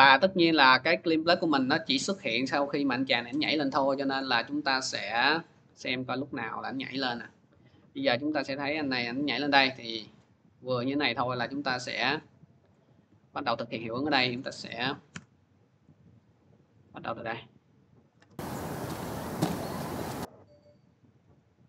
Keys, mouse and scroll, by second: 3.2 click, 4.0 click, 5.2 click, 10.0 click, 12.5 click, 14.2 click, 14.9 alt+[, 16.7 click, 17.9 click, 21.0 click.